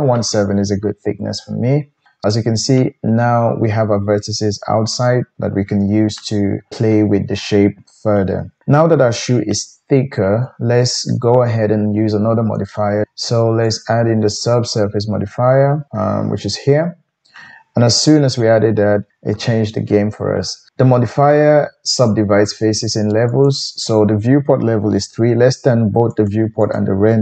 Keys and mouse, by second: 26.4 middle click, 26.7-27.2 drag.